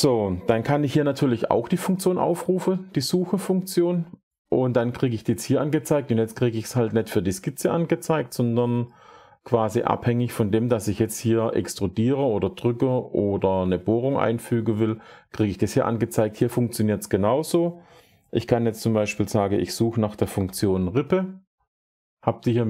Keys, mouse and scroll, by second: 2.3 s, 16.8-19.4 drag, 20.0 typing.